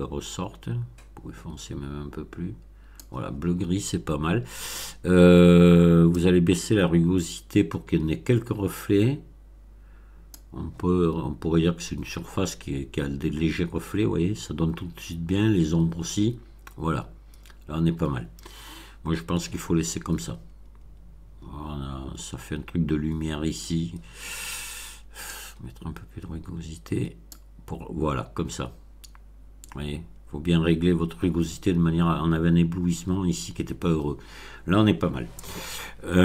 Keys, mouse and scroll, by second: 6.1-10.4 drag, 25.2-27.4 drag.